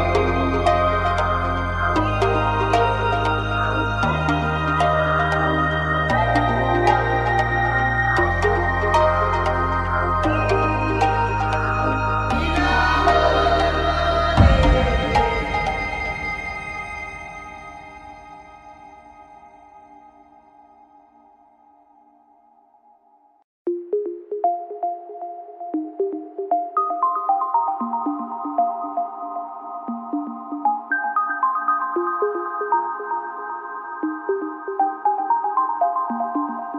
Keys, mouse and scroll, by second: 0.9 click, 1.9 click, 1.9 x, 3.9 a, 5.4 right click, 6.2-7.8 drag, 6.5 right click, 8.5 g, 11.4-13.4 middle drag, 13.4-14.4 right drag, 13.8 click, 15.7 g, 19.7 n, 20.6 click, 21.0 m, 21.6 n, 23.5-24.7 drag, 24.7 middle click, 24.8 KP_7, 27.4 n, 28.4 click, 28.5 n, 29.7 g, 33.1 right click, 33.7 g.